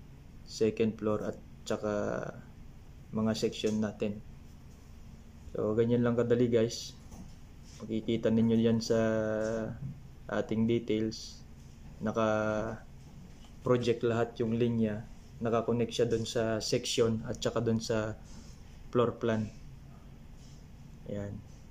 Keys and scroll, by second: 2.7 ctrl+3, 5.5 ctrl+2, 20.1 shift+2.